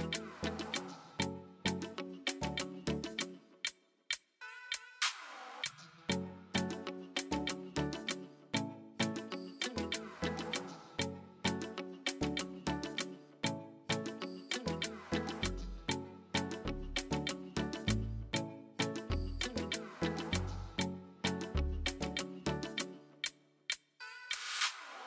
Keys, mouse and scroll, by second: 2.4 space, 3.4-4.3 space, 5.5 space, 7.7 click, 10.5-13.5 drag, 13.5 space, 15.6 space, 18.3 click, 20.0-21.3 drag, 21.5-22.6 drag, 22.6 space.